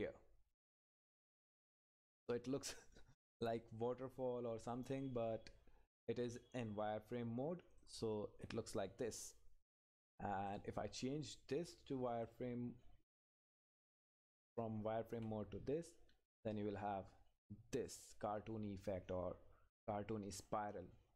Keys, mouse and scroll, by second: 1.8-7.8 drag, 14.0 Right, 17.9 click.